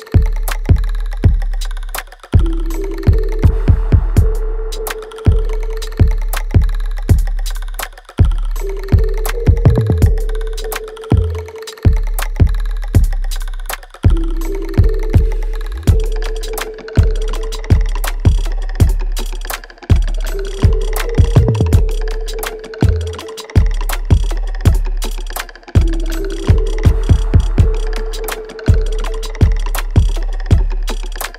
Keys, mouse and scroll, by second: 0.5-3.0 drag, 3.0-5.0 drag, 8.1 click, 9.3 space, 10.1 alt+click, 11.3 right click, 11.3 alt+right click, 12.0 alt+right click, 13.1 click, 17.2-18.7 drag, 20.9-23.0 alt+right drag, 23.0 click, 25.9 right click, 26.4 alt+click, 27.0 alt+middle click, 27.6-29.7 alt+right drag, 29.7-31.3 alt+drag.